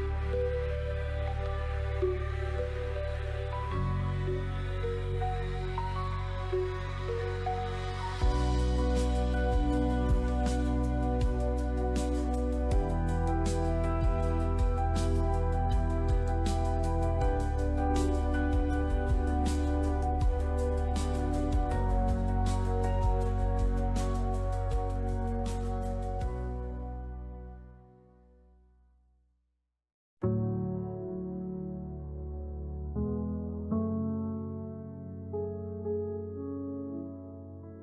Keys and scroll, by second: 1.3 j, 2.4-3.4 typing, 6.5 Return, 7.8-9.8 typing, 14.0 Escape, 15.6 shift+x, 18.0-19.0 typing, 19.3 Tab, 21.7 5, 21.8 Return, 22.4 5, 22.6 Return, 27.1 Escape, 28.1 ctrl+z, 30.6-31.6 typing, 32.0 Tab, 34.1 Return, 36.4 j, 37.7-37.8 typing.